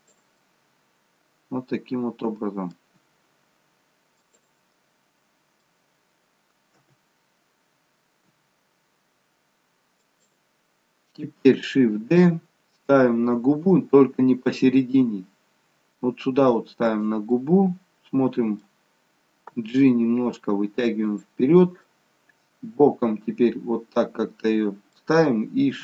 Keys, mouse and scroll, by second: 0.4 middle click, 3.0 g, 4.6 middle click, 6.9 KP_1, 8.4 g, 12.1 shift+d, 17.4 middle click, 19.5 g, 21.9 middle click.